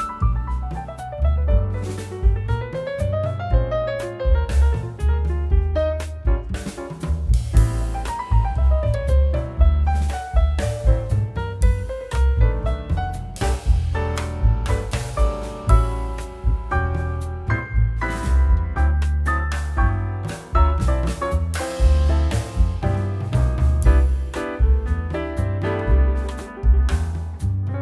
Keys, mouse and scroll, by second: 12.1 double click, 12.9 5, 19.0 Return, 19.0 5, 27.6 m.